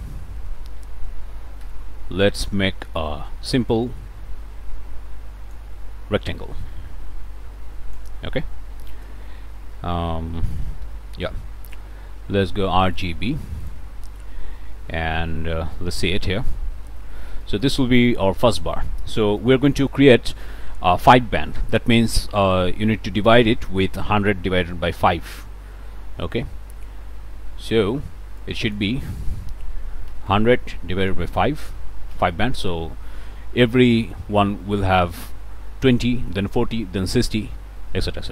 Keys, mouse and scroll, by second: 0.5 ctrl+space, 0.5 ctrl+scroll up 1, 0.8 ctrl+click, 1.2-1.6 scroll down 2, 1.6-2.7 scroll up 2, 1.6 f, 2.7 scroll down 2, 2.8 click, 3.7-5.7 drag, 6.6-8.2 drag, 8.9 space, 9.7-12.3 drag, 10.8 f, 12.4 click, 12.9 click, 15.7 click, 16.0 1, 16.4 click, 16.7-17.4 scroll up 3, 17.4 scroll down 2, 17.4 middle click, 19.4 middle click, 26.5 Return, 28.4 click, 29.7 1, 30.1 0, 31.1 /, 31.4 5, 32.1 Return.